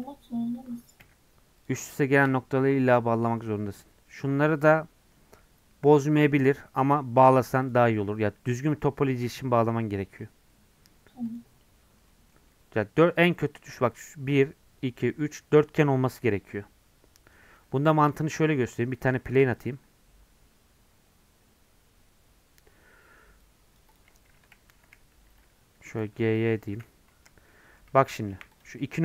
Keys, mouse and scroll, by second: 1.0 j, 1.7 click, 2.5 j, 3.8 Tab, 7.7 click, 9.7 Tab, 10.1 Tab, 11.4 click, 11.7 Tab, 11.9 scroll down 1, 12.1 middle click, 12.3 scroll up 2, 12.5 Tab, 13.4 scroll up 1, 13.6-17.1 middle drag, 17.1 scroll down 1, 17.4 Tab, 17.6 scroll down 1, 17.8-24.0 middle drag, 25.8 g, 27.1 KP_Decimal, 27.5 middle click, 28.1 Tab, 28.6 click.